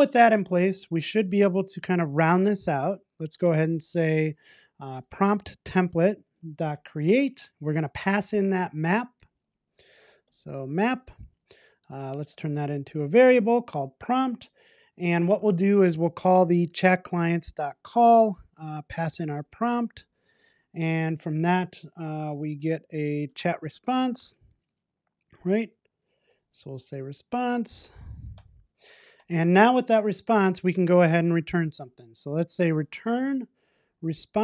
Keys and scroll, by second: 5.8 Return, 12.6 Return, 16.8 Return, 24.2 Return, 28.4 Return, 31.5 Tab.